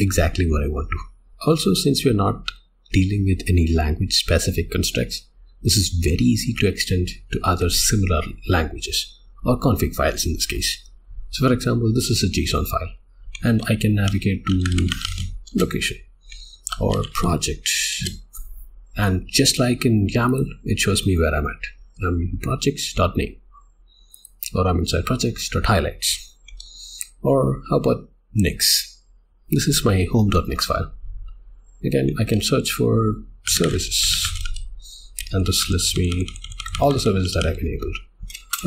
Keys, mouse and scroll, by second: 1.3 k, 15.5 Return, 17.9 Return, 20.3 click, 24.1 click, 26.5 Escape, 29.3 Return.